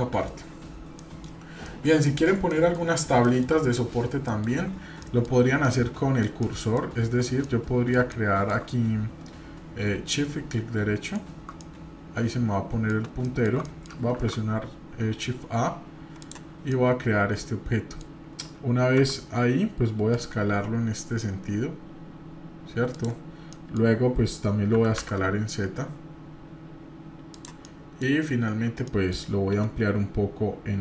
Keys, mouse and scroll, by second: 1.0 middle click, 1.4 scroll down 1, 1.6 middle click, 2.1 middle click, 2.5 middle click, 3.2 middle click, 4.3 middle click, 5.0-5.3 middle drag, 5.3 scroll up 1, 5.6-6.2 middle drag, 6.4-6.7 shift+middle drag, 6.9-7.4 scroll up 2, 7.4-8.6 middle drag, 11.0-11.5 shift+right drag, 11.6-12.9 middle drag, 13.2 shift+middle drag, 13.6 middle click, 14.1 shift+a, 16.7-18.0 middle drag, 23.5 middle click, 24.7 s, 27.6 middle click, 28.2 scroll up 1, 28.9 middle click.